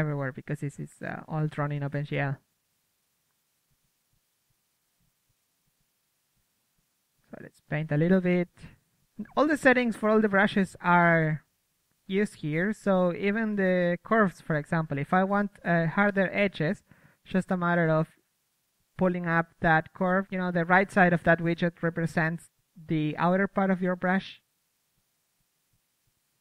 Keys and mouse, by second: 0.6-1.3 right drag, 1.3-2.6 middle drag, 2.6-4.8 drag, 5.1-6.5 drag, 6.6 KP_3, 7.0 z, 7.2 z, 7.4 KP_1, 8.1 middle click, 8.7-10.0 drag, 10.0 f, 10.6-13.1 drag, 10.7 f, 12.5 a, 12.8 a, 13.1 a, 14.3-15.8 drag, 14.3 a, 14.7 a, 16.6-17.9 drag, 18.1-19.6 drag, 18.9 f, 19.6 right click, 19.8 f, 21.9 KP_1, 23.0 click.